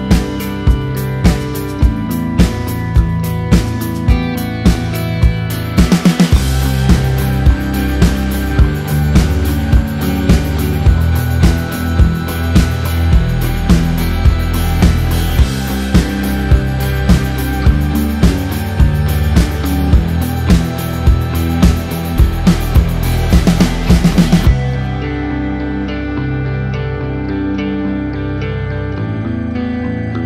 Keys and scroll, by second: 14.9 ctrl+q.